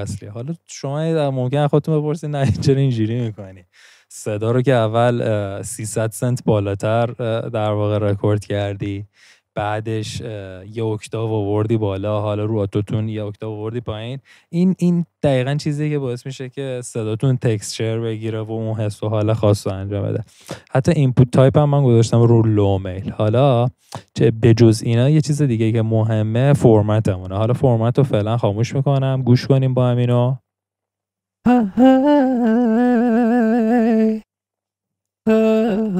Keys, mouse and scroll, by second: 31.4 i, 32.1 d.